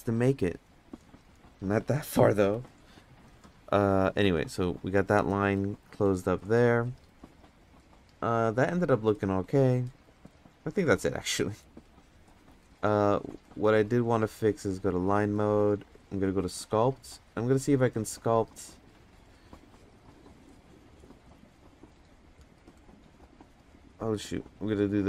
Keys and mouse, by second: 2.4 g, 5.3 middle drag, 5.8 middle click, 6.3 middle click, 6.8 middle drag, 9.1-9.4 middle drag, 9.8-10.3 middle drag, 11.3-11.6 middle drag, 12.2 middle drag, 13.2 click, 14.8 click, 16.2-18.8 drag, 21.4 f, 22.3-23.0 drag, 24.6 click.